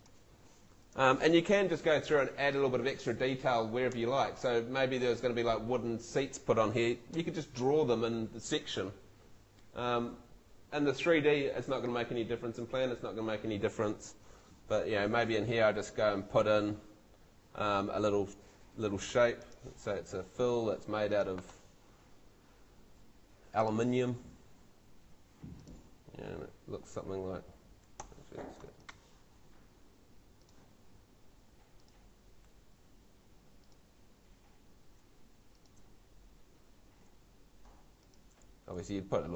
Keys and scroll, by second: 28.0 Escape.